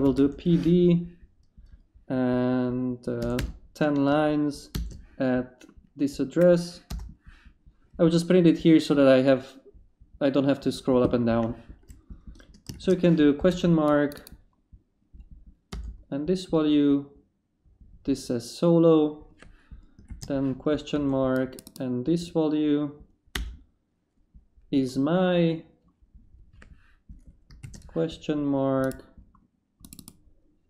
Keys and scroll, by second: 0.0-0.5 typing, 3.0-4.7 typing, 6.9 Return, 12.7 shift+/, 13.4 shift+space, 13.9 space, 15.7 Return, 20.1 shift+/, 20.9 shift+space, 23.3 Return, 27.6 shift+/.